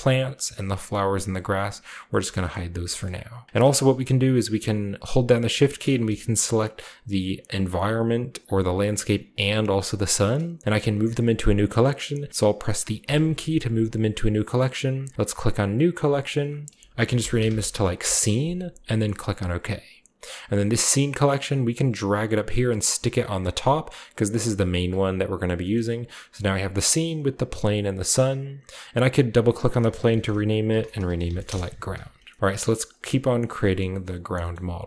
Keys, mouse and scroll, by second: 0.7 click, 1.2 click, 2.1-4.5 shift+middle drag, 3.0 scroll up 2, 5.1-6.2 shift+right drag, 6.0 g, 6.3 click, 7.5 click, 8.4 g, 8.7 drag, 9.3 shift+click, 9.4 shift+right click, 13.0 m, 15.6 click, 16.9-17.5 typing, 17.9 Return, 18.9 click, 21.3-23.1 drag, 25.6-27.3 middle drag, 26.5 drag, 26.8 click, 27.3 click, 27.6 click, 28.9 click, 30.1-32.4 typing, 32.1 scroll down 2, 34.0-34.8 shift+middle drag, 34.8 click.